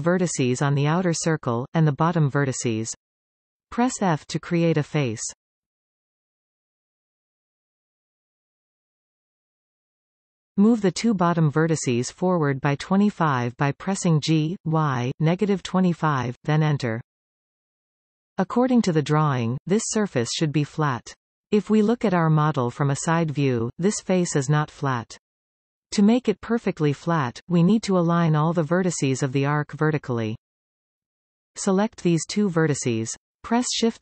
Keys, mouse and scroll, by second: 1.6 KP_1, 2.0 scroll up 3, 2.5 shift+middle click, 2.8-4.0 scroll up 3, 4.0 alt+a, 5.6 b, 9.5 f, 10.1 scroll down 3, 11.0-11.4 scroll down 4, 11.4-12.4 middle drag, 12.4 click, 13.1 shift+click, 15.0 g, 18.8-20.2 scroll down 2, 20.2 KP_3, 21.4-23.3 scroll up 4, 23.3-23.8 scroll up 6, 25.6-26.1 scroll down 2, 26.1 middle click, 26.7-27.2 scroll down 2, 28.3 KP_1, 28.7-29.3 scroll up 4, 29.3 shift+middle click, 29.7-30.4 scroll up 2, 30.4 click, 32.3 shift+click, 32.9 shift+s.